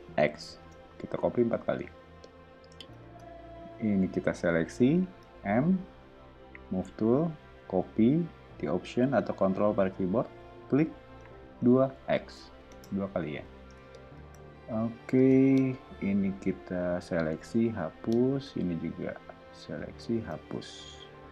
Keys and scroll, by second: 0.1 x, 0.6 Return, 1.5 o, 3.0 space, 5.2 m, 11.6 2, 12.0 x, 12.2 Return, 12.7 space, 13.5 o, 15.2 space, 17.3 BackSpace, 20.4 BackSpace.